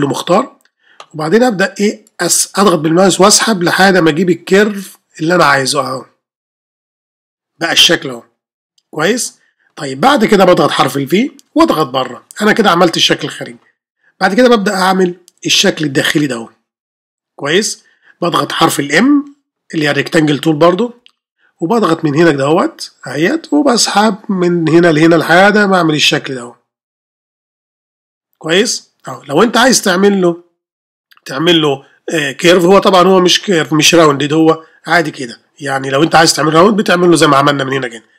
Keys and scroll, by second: 11.1 ر, 21.0 ة.